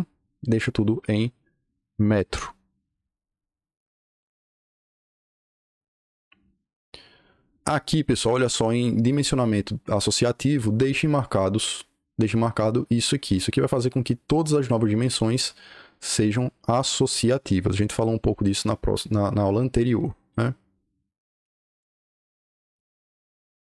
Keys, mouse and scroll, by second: 21.7-23.6 drag.